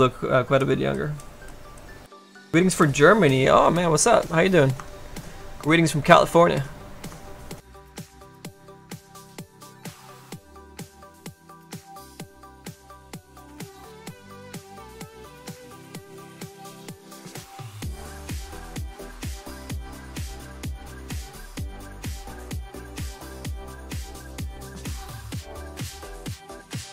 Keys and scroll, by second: 10.1 s, 14.1 s, 15.1 s, 19.3 s.